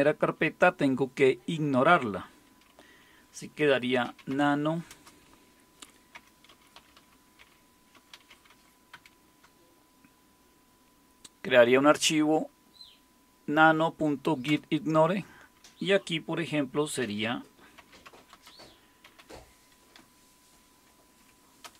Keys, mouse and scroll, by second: 3.7-9.4 typing, 14.5 Return, 17.5-19.7 typing, 19.9 Left, 20.6 Left, 20.7-21.6 Left, 21.6 Return.